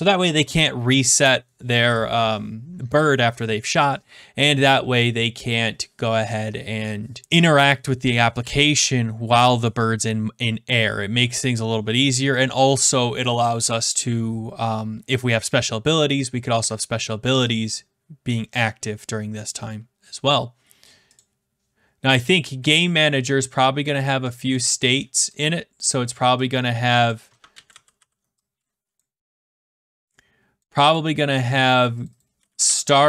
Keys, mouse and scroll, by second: 0.2 click, 18.3 click, 21.1 click, 23.8 click, 24.5 click, 25.0 middle click, 25.7 click, 27.1 click, 27.5 ctrl+c, 27.6 ctrl+v, 27.9 ctrl+v, 28.9 click, 30.5 click, 30.9 click, 32.1-33.0 typing.